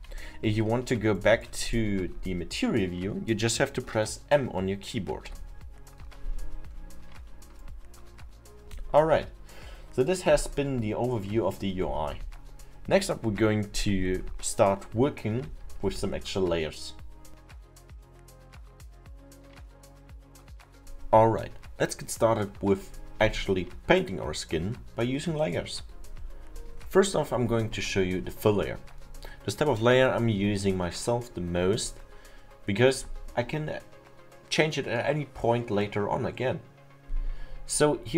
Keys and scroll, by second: 5.3 m.